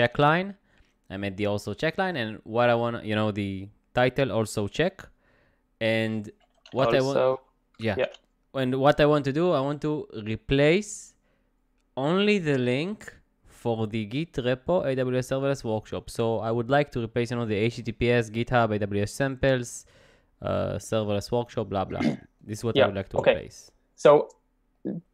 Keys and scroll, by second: 6.2-7.6 typing, 8.0 Return.